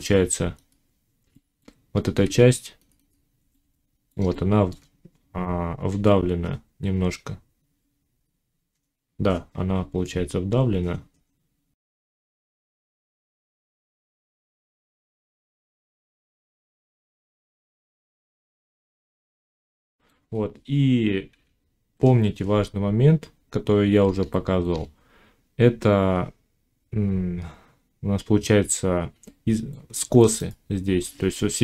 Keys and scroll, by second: 1.4 Tab, 14.1 ctrl+z, 18.4 s, 19.4 Tab, 21.2 1.